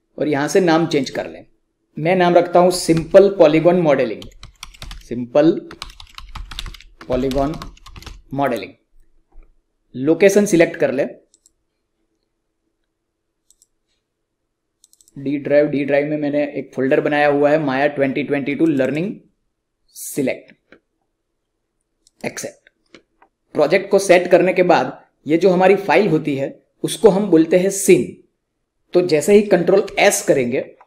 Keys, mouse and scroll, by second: 2.7 shift+Num_Lock, 2.7 click, 2.8-8.4 typing, 11.3 click, 18.5 click, 20.0 click, 29.2 click, 29.8 ctrl+s.